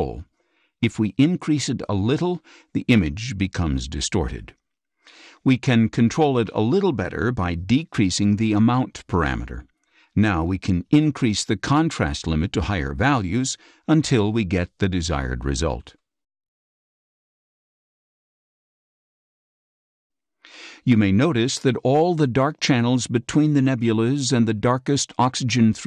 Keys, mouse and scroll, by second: 4.3-6.8 drag, 8.5-9.9 drag, 11.5-12.2 drag, 13.5 click, 17.0 click, 18.9 click, 19.5 click.